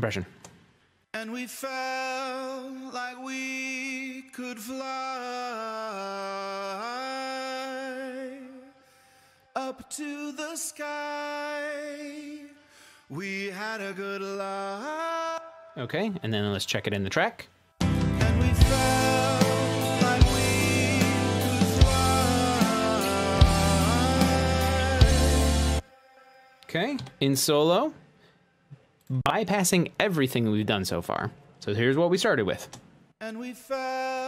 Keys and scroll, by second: 1.7 space, 16.3 space, 17.5 shift+super+s, 26.8 space, 28.1 s.